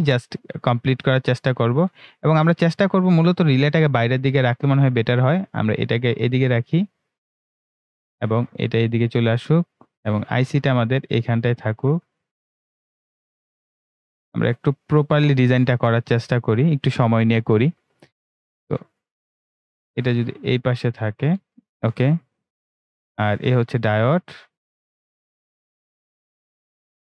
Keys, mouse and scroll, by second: 23.2-27.1 drag.